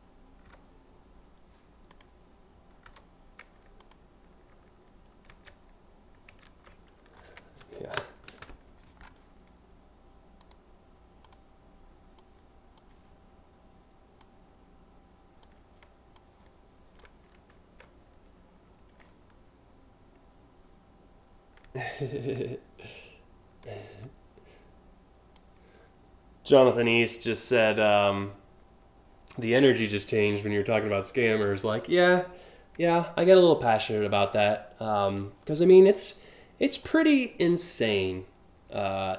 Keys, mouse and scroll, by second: 0.1 p, 1.5 click, 2.9 p, 3.4 click, 7.0 ctrl+z, 10.0 right click, 10.8 click, 11.8 click, 13.8-15.0 drag, 15.8 click, 17.2 ctrl+z, 22.4 alt+click, 25.0-27.1 drag, 30.4 scroll up 1, 32.4 a, 33.4-34.8 drag, 35.6 click.